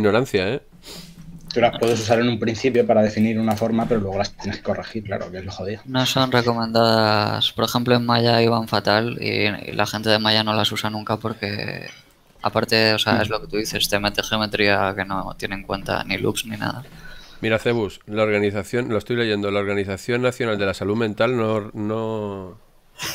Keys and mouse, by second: 5.5 shift+middle click, 7.5 shift+middle click, 15.9 shift+middle click, 18.3 shift+middle click, 21.3 shift+middle click.